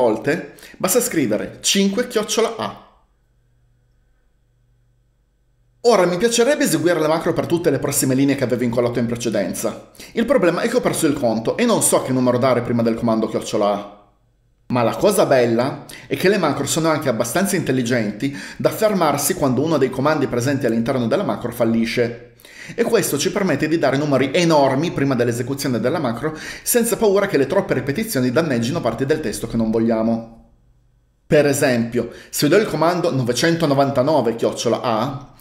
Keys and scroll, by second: 1.7-3.2 typing, 33.7-35.0 typing.